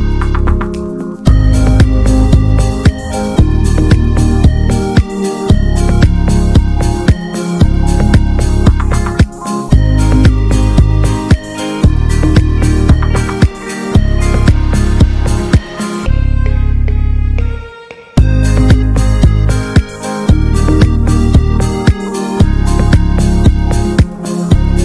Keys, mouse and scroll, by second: 2.7 Tab, 2.9 click, 3.2-3.8 middle drag, 3.8 click, 4.1 right click, 4.6 drag, 4.8 scroll down 1, 4.9-5.5 middle drag, 5.5 click, 6.2 click, 7.2 click, 7.5 drag, 7.7 scroll down 1, 7.9 middle click, 8.1 click, 8.3 scroll down 1, 8.4 shift+middle drag, 8.7 click, 8.8 scroll down 1, 9.0-10.1 middle drag, 10.1 click, 10.3-10.6 scroll up 2, 10.6 s, 12.5 middle drag, 12.8-13.5 scroll up 2, 13.0 shift+middle click, 13.5 ctrl+s, 13.7 middle click, 13.8 Tab, 14.0 shift+middle click, 14.2-14.8 scroll up 1, 14.8-15.2 scroll up 1, 15.2 3, 15.3 click, 16.7 alt+shift+click, 17.1 alt+middle click, 17.3 alt+z, 17.6 shift+middle click, 18.0 ctrl+click, 19.2 middle click, 19.6 alt+z, 19.8-22.3 shift+middle drag, 22.3 ctrl+s, 22.9 shift+d.